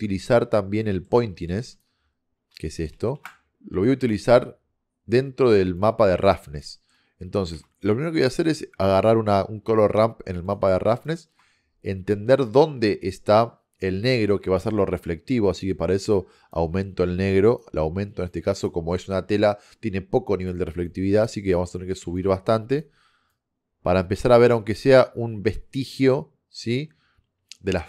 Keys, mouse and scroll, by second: 1.8 click, 5.9-6.5 drag, 6.8 middle click, 7.7 shift+a, 10.8 click, 10.8-11.1 middle drag.